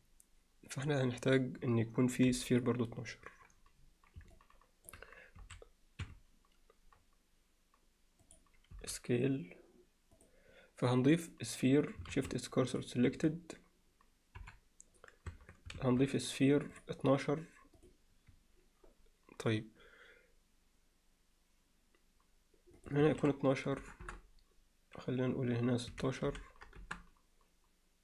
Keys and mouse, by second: 2.3 KP_7, 4.3 alt+middle click, 5.4 s, 8.3 click, 12.1 shift+s, 13.1 Tab, 14.4 KP_7, 15.3 Tab, 15.8 shift+a, 17.8 click, 22.8-23.9 drag, 24.0 Return.